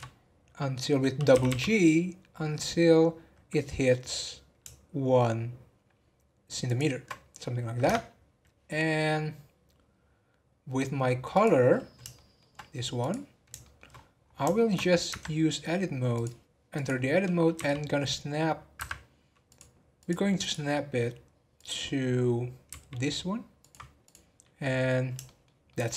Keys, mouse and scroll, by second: 0.8 scroll up 2, 1.3 g, 7.8 Tab, 9.5-10.4 scroll down 2, 11.3 click, 12.1-12.6 shift+middle drag, 12.6-12.9 scroll down 2, 12.9 click, 13.6 shift+middle drag, 13.9 scroll up 3, 14.5-15.1 shift+middle drag, 15.1 Tab, 16.1 click, 17.5 g, 19.5 click, 20.0-22.7 drag, 22.7 g, 24.0 click, 24.6 scroll down 3, 25.2-25.9 shift+middle drag.